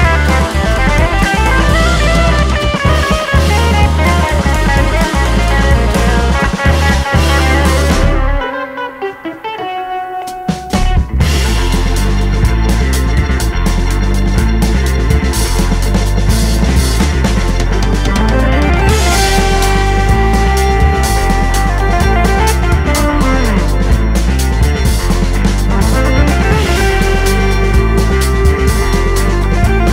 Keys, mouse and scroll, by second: 3.5 g, 3.9 click, 4.1 `, 5.8 Tab, 6.0 scroll up 1, 7.0 click, 7.9 shift+click, 8.4 g, 9.8-10.3 scroll down 1, 12.1 scroll down 1, 13.3 click, 13.7 shift+click, 14.1 e, 15.2-16.0 scroll up 1, 16.0 ctrl+z, 16.2 shift+click, 16.6 e, 17.5 click, 18.4 scroll up 1, 19.1 click, 19.5 e, 20.4 alt+click, 20.6 f, 20.9 alt+click, 21.1 f, 22.3 click, 22.4 a, 22.9 shift+n, 23.0 Tab, 23.7 right click, 23.7-24.1 scroll down 1, 24.1 click, 24.5-29.9 right drag, 24.6 alt+a, 25.2 scroll up 1, 25.9-26.2 scroll up 1, 27.8 `, 28.1 3, 28.7 alt+a, 29.4 `, 29.7 1.